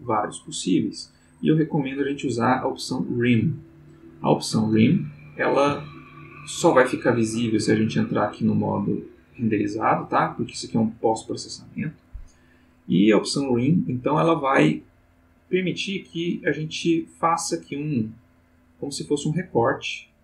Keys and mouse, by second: 3.5 click, 5.0 ctrl+middle click, 7.8 click, 14.6-16.5 drag, 16.8-18.4 drag, 18.7-19.9 drag.